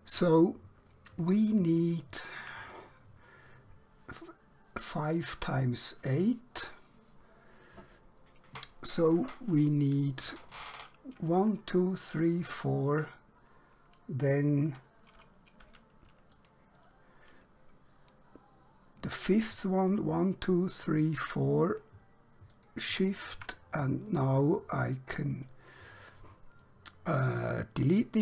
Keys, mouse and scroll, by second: 1.6 shift+middle click, 16.1 alt+Num_Lock, 16.4 alt+click, 22.6 alt+shift+click, 25.4 right click, 28.1 click.